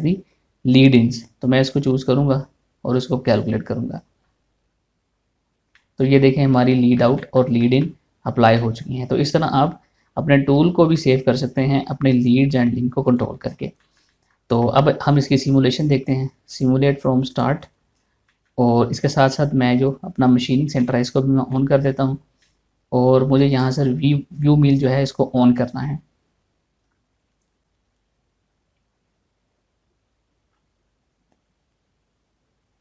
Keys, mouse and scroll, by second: 1.6 click, 6.3-13.6 middle drag, 13.6 click, 14.1 scroll down 1, 14.4 shift+middle click, 16.4 click, 17.0 right click, 17.9 click, 18.6 scroll down 1, 18.9 shift+middle click, 20.3 click, 21.4 shift+middle click, 22.7 scroll up 1, 23.0 shift+middle click, 24.1 click.